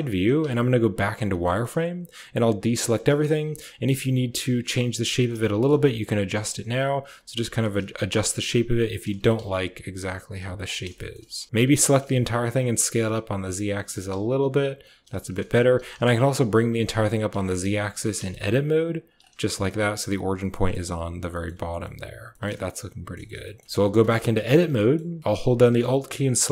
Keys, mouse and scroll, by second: 0.3 z, 1.3 shift+click, 2.5 a, 3.3 b, 4.5-11.7 typing, 10.8 shift+click, 13.7 g, 15.0 shift+click, 15.5 g, 17.3 shift+click, 17.8 g, 19.4 shift+middle click, 20.4 middle click, 20.7 Tab, 21.2 click, 21.5 z, 21.7-22.3 drag, 22.4-23.0 drag, 23.1 shift+click, 23.3 click, 23.7 Tab, 23.8 click, 24.1 shift+click, 24.6 click, 26.4 alt+click.